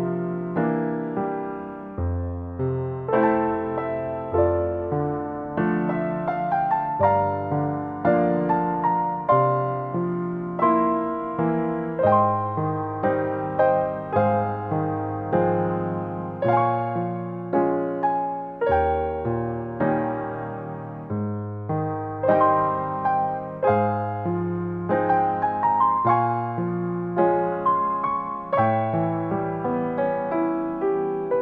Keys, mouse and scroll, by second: 0.0 click, 0.9 scroll up 1, 1.3 shift+middle click, 2.7 click, 4.0 middle click, 5.0 shift+middle click, 5.4-6.0 scroll up 6, 6.1 click, 6.7 scroll up 2, 6.8 middle click, 7.9 click, 9.7 click, 12.6 middle click, 13.1-13.6 scroll down 4, 13.6 shift+middle click, 14.2 scroll up 2, 14.6 shift+middle click, 14.8 scroll up 2, 16.3 click, 17.1 click, 17.6 scroll down 1, 17.9 middle click, 20.5 click, 21.4 click, 22.3 click, 22.9 click, 24.3 click, 24.5 click, 24.7 click, 25.1 click, 25.4 click, 26.3 click, 27.3 click, 28.1 click, 29.1 click, 30.1 click.